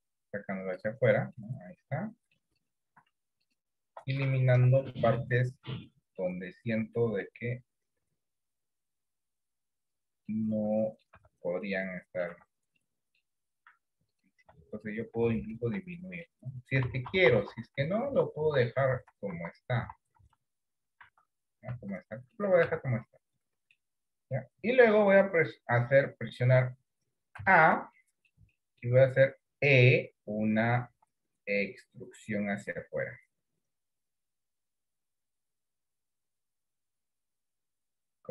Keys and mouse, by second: 0.0 click, 1.4-2.4 middle drag, 4.7 Delete, 6.3 middle click, 7.7-10.0 drag, 10.3 middle click, 11.2 Tab, 11.7 middle click, 12.4 Tab, 12.8 middle click, 16.0 middle click, 16.9 ctrl+z, 17.2 ctrl+z, 17.4 ctrl+z, 17.6 ctrl+z, 17.8 ctrl+z, 18.1 ctrl+z, 18.4 ctrl+z, 19.0 ctrl+z, 19.4 ctrl+z, 19.8 ctrl+z, 21.8 Tab, 22.4 middle click, 22.8 Tab, 23.2 middle click, 27.4 a, 28.1 middle click, 28.6 middle click, 31.0 e.